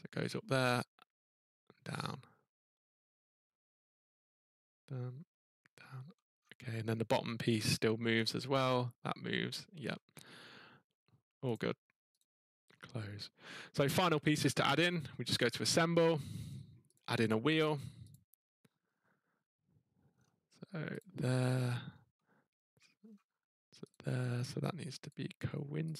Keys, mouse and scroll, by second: 0.1 scroll, 0.2 scroll down 3, 6.2 middle click, 6.3 scroll up 1, 6.8 scroll down 4, 8.2 click, 9.8 middle click, 11.5 click, 12.2 click, 12.6 scroll up 4, 12.9 scroll down 3, 13.3 scroll up 1, 14.2-15.7 scroll, 15.7 click, 16.9 click, 18.1 click, 18.8 scroll, 20.0 middle click, 20.1 scroll, 21.0 click, 21.5-21.9 scroll, 22.7-23.1 scroll, 23.9 click, 25.1 click, 25.9 click.